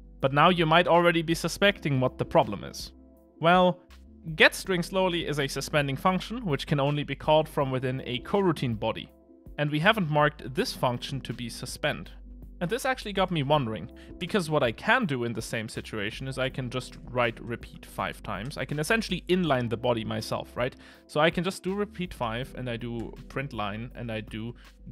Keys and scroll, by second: 17.0 Return, 23.1 Return.